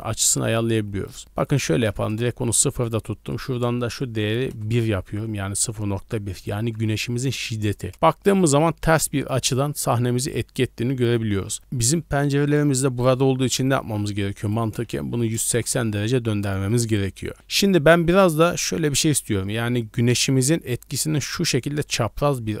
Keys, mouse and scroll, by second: 0.7 middle click, 1.0-1.3 scroll up 2, 1.4 click, 3.3-4.5 drag, 7.9 scroll down 1, 10.8-11.3 scroll down 2, 11.1-11.6 middle drag, 11.6 scroll up 1, 13.4 middle drag, 14.4-15.5 drag, 16.4-16.7 middle drag, 16.8 scroll up 1, 17.3 middle click, 18.4-18.8 middle drag, 19.0 d, 19.5 middle drag, 20.6 d, 21.0-22.6 drag.